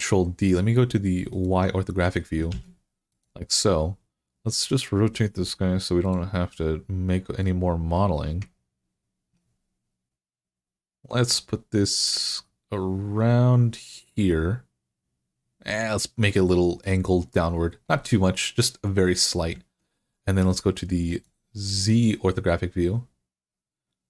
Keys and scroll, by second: 2.3 d.